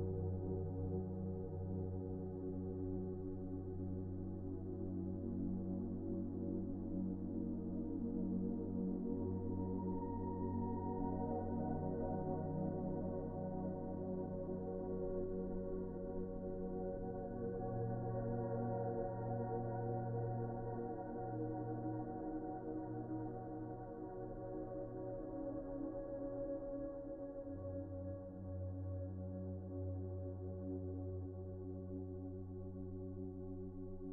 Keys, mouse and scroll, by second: 0.2 Delete, 0.4 Delete, 2.9 s, 7.1 s, 7.8 middle click, 10.4 s, 13.0 s, 19.0-20.6 typing, 27.2 c, 27.8 Delete, 30.3-31.5 typing.